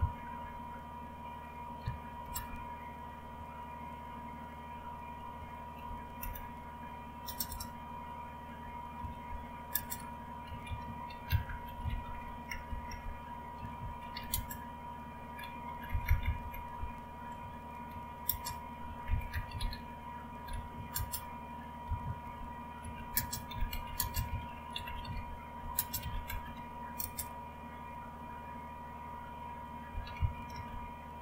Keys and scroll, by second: 0.0-0.9 typing, 2.3 typing, 3.3 Right, 3.3-3.9 typing, 3.9-5.2 Right, 5.4 Right, 6.2 Return, 7.2 space, 9.0-14.6 typing, 15.9 Left, 16.2 Left, 16.4 Left, 16.8 Delete, 17.1 Right, 17.1-27.0 typing, 29.9-31.2 typing.